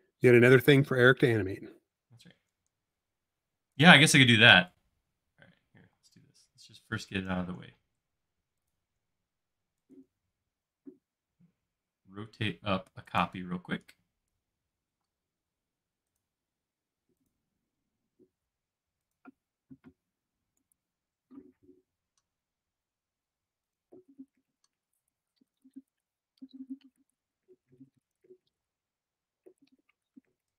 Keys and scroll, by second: 0.8 q, 4.1 shift+space, 5.9 q, 13.8 space, 15.1 q, 28.7 space.